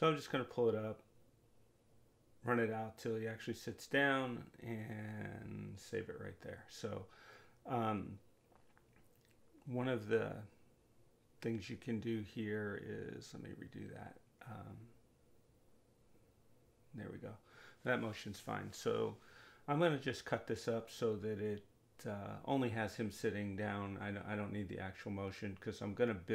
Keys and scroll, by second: 1.3 space, 25.8 Delete.